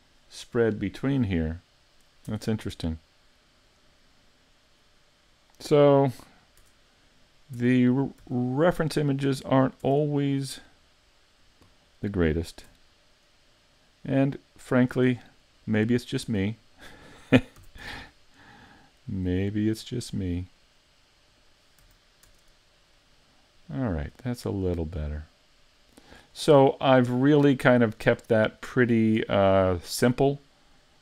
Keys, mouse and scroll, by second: 2.3 Tab, 3.6 right click, 4.7 right click, 5.3 right click, 5.8 Tab, 6.0 right click, 6.6 Tab, 7.6 Tab, 8.2 z, 9.8 Tab, 12.4 right click, 12.9 shift+right click, 14.2 right click, 14.6 shift+right click, 17.6 s, 21.4 click, 21.8 a, 22.3 Tab, 23.0 middle click, 26.4-26.9 scroll down 5, 26.9 middle click, 28.2-28.7 scroll down 1, 28.7 middle click, 29.2 a, 29.7 middle click.